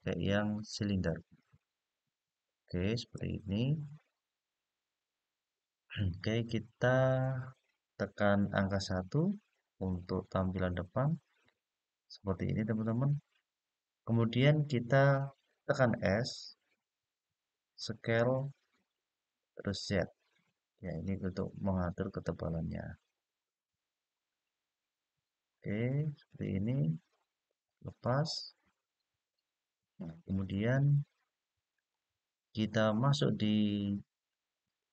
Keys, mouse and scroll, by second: 2.9-4.7 middle drag, 5.7-6.4 scroll up 4, 10.5 KP_1, 17.5-19.8 s, 19.8-25.3 z, 27.2 click, 28.0-28.9 scroll up 4, 30.0-31.4 middle drag, 34.4-34.9 drag.